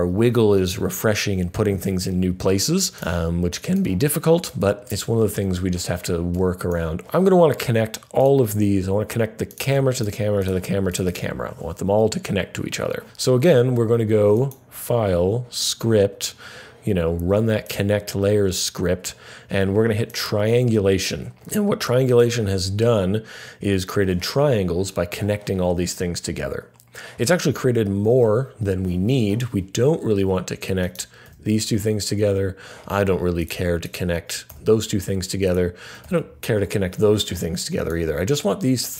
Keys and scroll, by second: 31.2 Delete, 34.4 Delete, 36.0 Delete.